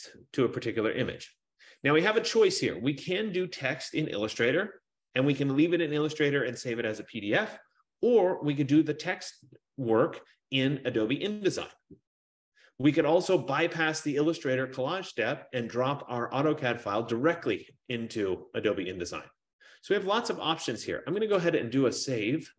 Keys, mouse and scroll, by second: 21.6 click.